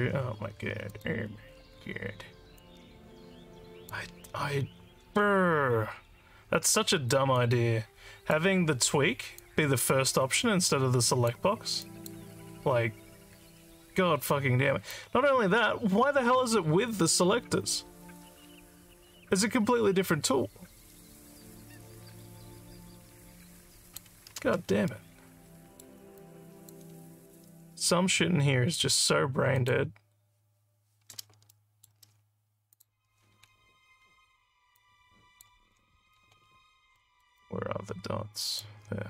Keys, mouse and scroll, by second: 0.9 click, 2.6-3.9 drag, 7.4 click, 9.4-11.3 drag, 11.8 click, 14.9-24.0 drag, 24.9 alt+middle click, 26.2 alt+click, 29.6 click, 31.5 alt+middle click, 32.7 click, 34.0 alt+scroll up 2, 34.8 alt+click, 36.4 alt+scroll down 1, 36.9 alt+middle click, 37.3-38.6 alt+drag.